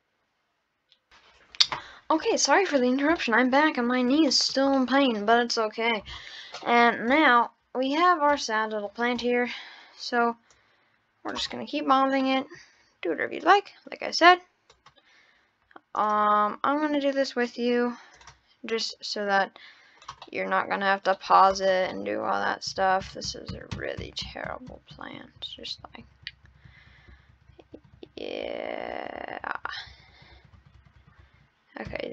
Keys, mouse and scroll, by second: 2.3-2.8 middle drag, 2.8-3.2 scroll down 3, 3.2-3.5 middle drag, 3.6 scroll up 5, 4.3-4.7 shift+middle drag, 4.8-6.4 middle drag, 6.4 scroll up 1, 6.6-8.1 middle drag, 8.3 scroll up 1, 8.3-8.9 middle drag, 9.1 scroll up 2, 9.2-9.7 middle drag, 9.7-10.5 scroll up 3, 10.5 click, 11.3 click, 11.5-12.9 middle drag, 13.4 click, 15.3-15.9 scroll down 4, 16.0-17.0 drag, 18.1 click, 20.2-21.5 middle drag, 21.5 click, 21.9-22.8 middle drag, 23.1 ctrl+z, 23.3-24.6 ctrl+z, 26.0-28.0 ctrl+z, 30.3 ctrl+z.